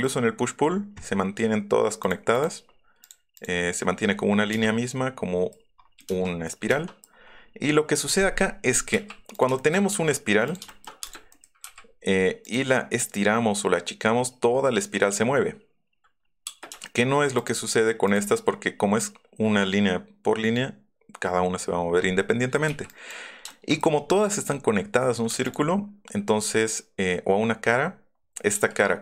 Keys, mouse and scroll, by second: 2.0 click, 2.3 click, 5.5 middle click, 6.4 middle click, 7.1 middle click, 8.8 m, 9.3 click, 9.5 shift+click, 10.4 click, 11.0 click, 11.0 space, 11.3 scroll, 11.6 ,, 12.4 click, 15.8 middle click, 16.4 space, 17.4 click, 18.0 click, 22.6 e, 22.9 middle click, 23.9 middle click, 25.4 click, 26.4 middle click, 26.4 scroll up 4, 28.5 s.